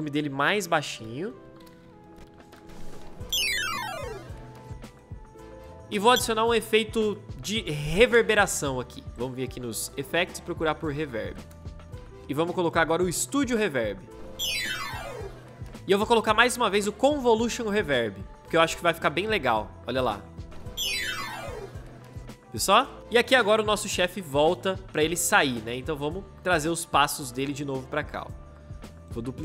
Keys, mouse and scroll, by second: 2.4 space, 10.0-12.1 typing, 14.1 space, 15.7 ctrl+z, 20.3 space, 28.9-29.4 alt+drag.